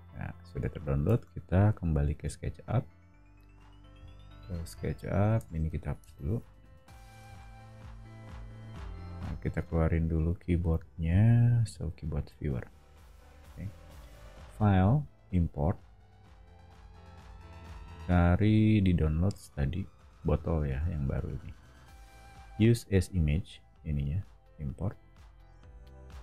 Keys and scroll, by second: 1.1 super+Tab, 3.9 o, 5.5 space, 6.0 BackSpace, 7.2 BackSpace.